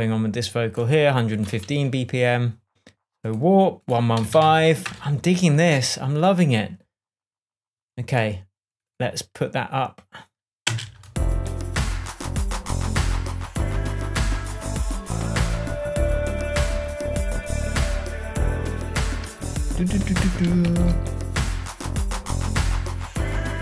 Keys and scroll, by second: 4.3-5.3 typing, 11.1 space, 21.0 super+d.